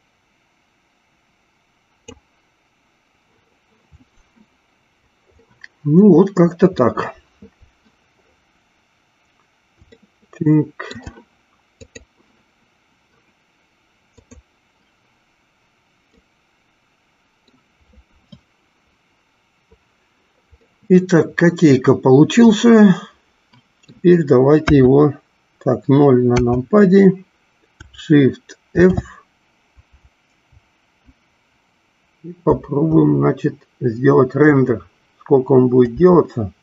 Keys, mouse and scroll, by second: 5.6-7.0 middle drag, 10.2 shift+middle click, 11.9 click, 14.2 click, 16.3-17.8 middle drag, 20.8-24.3 middle drag, 24.9 KP_3, 26.4 KP_0, 28.8 shift+f, 30.0 Up, 30.4 Up, 30.7 Up, 32.7 Down, 34.6 Right, 36.0 Left.